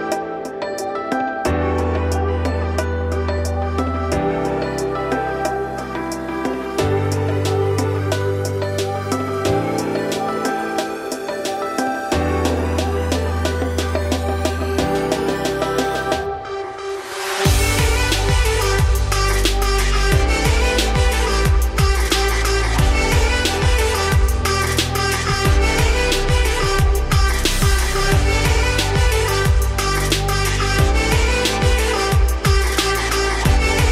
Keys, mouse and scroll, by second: 1.8 click, 2.2 shift+click, 2.6 x, 3.5 click, 3.8 `, 4.1-5.1 middle drag, 5.5-5.9 scroll down 4, 5.9 middle click, 6.2 scroll down 1, 6.2 `, 6.9 ctrl+s, 7.3 click, 7.5 Tab, 11.8-14.4 scroll down 2, 14.4-15.0 scroll down 1, 16.8-18.7 scroll down 1, 18.7-19.4 scroll down 4, 19.4-22.6 scroll up 5.